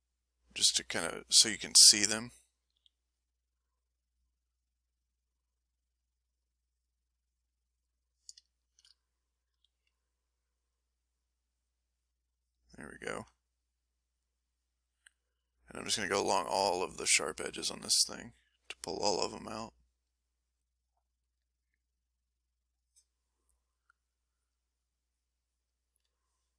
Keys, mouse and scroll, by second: 0.5 shift+click, 2.7 f, 3.1 click, 3.6 click, 4.1-6.6 drag, 6.6 click, 7.1 click, 8.5 shift+middle click, 9.5 f, 9.7 click, 10.4-13.1 drag, 13.3 middle click, 13.8-15.2 drag, 15.9-17.5 shift+drag, 18.3 click, 20.0 click, 21.6 click, 22.2 click, 23.5 click, 23.8-26.2 drag.